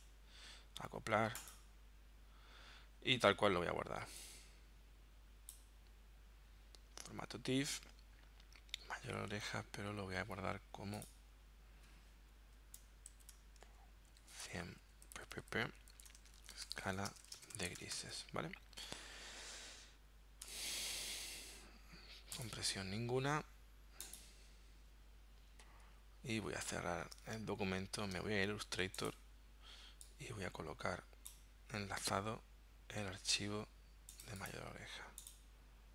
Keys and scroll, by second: 12.4 Right, 13.1 shift+-, 14.2-18.1 typing, 20.5 Return, 26.5 super+w, 27.2 super+Tab.